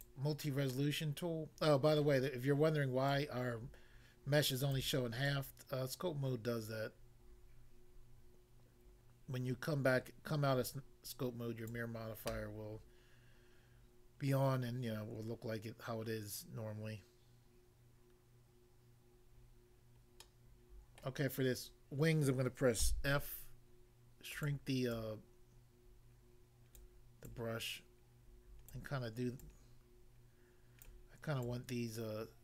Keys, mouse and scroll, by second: 0.1 click, 0.7 middle click, 2.0 middle click, 3.1 click, 4.8 click, 5.2 click, 11.7 click, 20.2 middle click, 21.0 middle click, 22.9 f, 24.4 click, 24.5 click, 24.9 click, 26.8 click, 27.2 click, 28.8 click, 29.4 click, 30.9 click, 31.4 click.